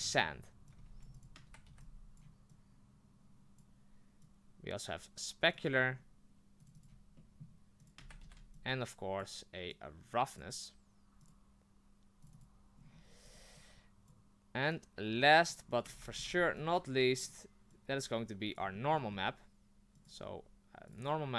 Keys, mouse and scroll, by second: 0.0 click, 0.7 click, 1.6 ctrl+v, 1.8-5.7 ctrl+drag, 6.7 click, 7.2 middle click, 7.8 click, 8.0 ctrl+c, 8.2 ctrl+v, 10.4 click, 12.3 click, 12.9 scroll down 4, 15.5 click, 16.1 ctrl+v, 18.6 click, 18.7-20.1 middle drag, 20.1 click, 21.0 click.